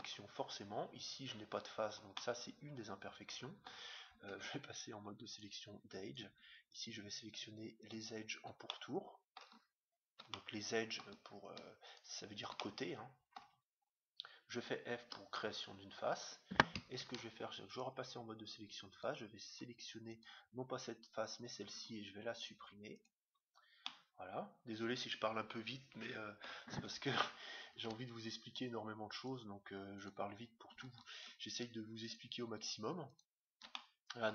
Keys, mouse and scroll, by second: 0.4-3.8 middle drag, 4.3 ctrl+Tab, 6.0-9.4 right drag, 8.7-12.2 middle drag, 11.9-13.5 right drag, 12.5-14.2 middle drag, 15.0 f, 17.0 ctrl+Tab, 18.9-21.7 right drag, 21.7 x, 23.7-25.6 middle drag, 29.2 ctrl+Tab, 29.9-34.3 right drag, 33.7-34.3 middle drag.